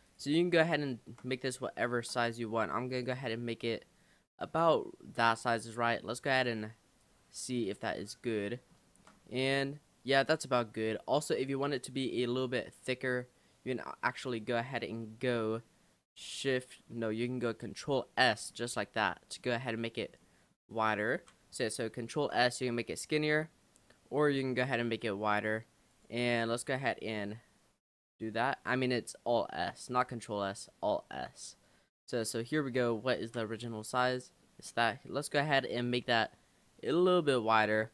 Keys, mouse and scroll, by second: 0.1 click, 0.5-0.8 scroll up 1, 0.8 shift+middle click, 1.3-1.6 scroll up 3, 1.6 shift+middle click, 2.3 s, 3.3-5.3 middle drag, 5.3 click, 7.0 click, 8.1 middle click, 8.6 scroll up 1, 8.8 shift+middle click, 9.2-9.8 scroll up 5, 10.6 click, 11.8 click, 14.3 click, 15.0-17.3 shift+middle drag, 17.3 alt+s, 18.6 middle click, 19.5-20.2 scroll up 3, 19.9 middle click, 20.2 middle click, 20.6-21.1 scroll down 2, 21.1 ctrl+z, 22.3 alt+s, 26.2 ctrl+z, 29.9 alt+s, 33.2 ctrl+z, 33.6 middle click, 34.3 scroll up 1, 34.4-36.1 middle drag, 36.1 alt+s.